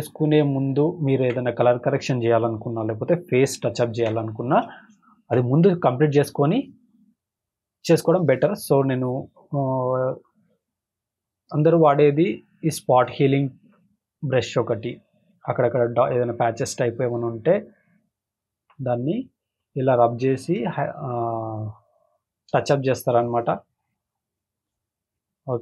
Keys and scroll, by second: 1.2 ctrl+=, 4.0 ctrl+=, 4.6 space, 5.1 space, 15.9 space, 16.4 space, 18.5 space, 19.0 space, 20.6 space, 21.1 space, 24.4 space, 24.9 space.